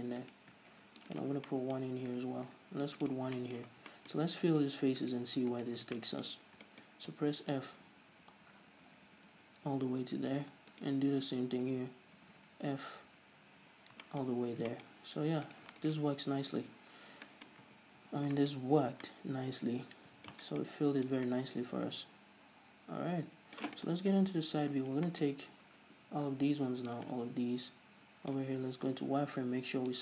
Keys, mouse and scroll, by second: 0.7 right click, 1.0 ctrl+r, 1.6 right click, 1.8-3.4 shift+middle drag, 2.6 ctrl+r, 3.4 right click, 3.7-5.3 shift+middle drag, 4.0 scroll down 2, 4.5-5.3 scroll up 1, 5.3 right click, 5.8 shift+right click, 6.1-10.7 shift+middle drag, 6.1 scroll down 1, 6.8 scroll down 1, 7.5 f, 10.7-11.7 right drag, 11.7 f, 14.4-15.8 shift+middle drag, 14.6-15.0 scroll up 2, 15.8 right click, 16.1 shift+right click, 16.9 f, 17.2-17.6 scroll down 2, 17.6-19.2 shift+middle drag, 18.0 Tab, 19.2 Tab, 20.8 scroll down 1, 20.9 middle click, 21.5 Tab, 21.6 middle click, 22.9-23.4 middle drag, 24.4 KP_3, 25.1-25.4 scroll up 1, 25.7 a, 25.9-27.2 middle drag, 26.4-27.2 scroll down 2, 27.2 click, 29.3 z.